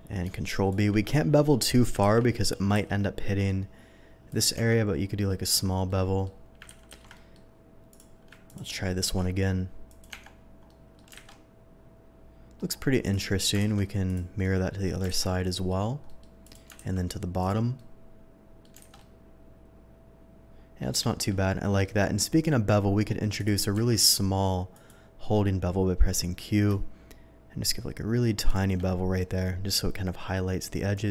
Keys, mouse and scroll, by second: 0.7 shift+click, 1.0 shift+middle click, 2.0 ctrl+z, 2.7 ctrl+b, 4.3 click, 4.5 Tab, 5.2 middle click, 5.8-6.2 middle drag, 6.6 ctrl+z, 6.9 ctrl+z, 7.1 middle click, 7.9 click, 8.4 ctrl+click, 9.0 ctrl+b, 9.8 click, 10.1 Tab, 10.6 middle drag, 11.1 alt+a, 11.2-12.5 middle drag, 13.0 click, 13.6 alt+x, 14.0 click, 14.4-14.8 middle drag, 15.1 alt+a, 15.2-15.6 middle drag, 16.0 middle click, 16.4 click, 16.7 alt+x, 17.4 click, 17.7-18.6 middle drag, 18.9 alt+a, 18.9-20.8 middle drag, 21.0 shift+middle drag, 21.7 shift+middle click, 22.4-23.1 shift+scroll up 1, 23.1 shift+middle drag, 23.3 shift+click, 23.7 q, 24.7 click, 28.4 shift+click, 28.7 shift+middle click, 29.1 shift+middle click, 30.9 shift+click.